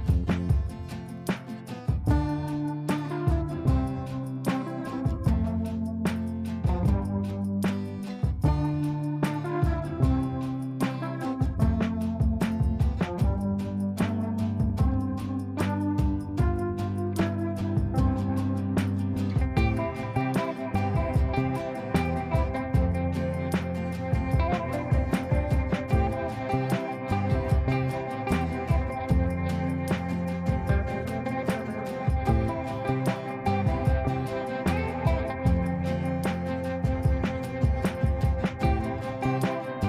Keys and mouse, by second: 0.2 click, 2.5 space, 3.3-4.5 drag, 6.3 ctrl+space, 7.5 shift+click, 8.4 b, 8.9 click, 9.1 F3, 10.3 click, 11.4 shift+click, 12.2 r, 12.7 click, 12.9 F2, 13.3-14.2 drag, 16.2 r, 17.0 click, 18.5 shift+click, 18.8 r, 19.2 click, 20.2 F2, 20.8-21.1 drag, 25.9 F3, 27.7-28.6 drag, 29.9 F2, 30.1-30.8 click, 31.8 shift+click, 32.3 click.